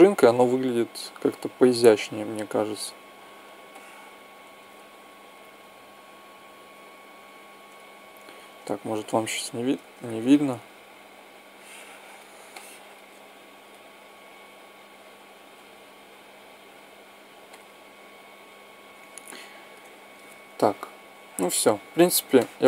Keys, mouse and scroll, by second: 0.3 click, 1.1 right click, 3.5 right click, 5.0-6.8 drag, 9.5 shift+right click, 11.0-12.1 shift+drag, 12.2-15.1 shift+drag, 15.3-17.1 drag, 17.2-19.0 drag, 19.0-20.0 middle drag, 20.8-22.1 drag, 22.1 middle click.